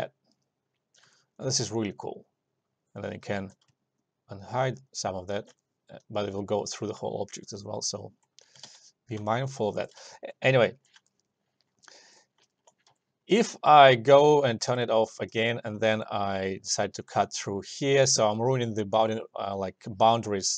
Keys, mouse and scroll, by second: 1.3-4.1 alt+drag, 4.1-5.7 ctrl+drag, 5.7-7.2 alt+drag, 7.2 alt+click, 8.8 ctrl+z, 9.4 alt+middle click, 9.7 alt+click, 10.1 alt+middle click, 10.5-12.7 alt+drag, 12.7 alt+middle click, 14.8 s, 15.5 click, 15.9 alt+middle click, 16.8 2, 17.1-20.4 drag.